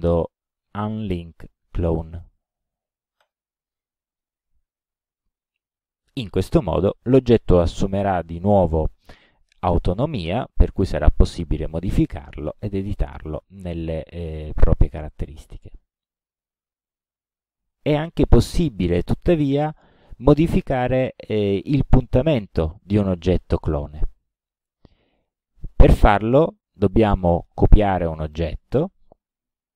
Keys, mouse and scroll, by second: 3.2 click, 6.2 click, 9.0 click, 10.6 click, 12.5 click, 13.8 click, 14.6 click, 16.2-17.5 middle drag, 19.1 click, 22.4 alt+d, 22.9-24.3 alt+drag, 28.4 click.